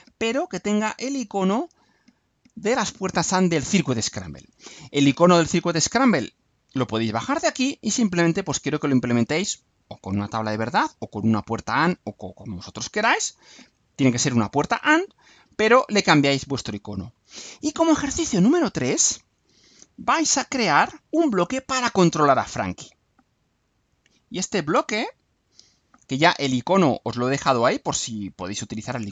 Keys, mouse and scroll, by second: 15.9-16.8 scroll down 4, 20.6 click, 25.0 click, 26.7-28.4 drag.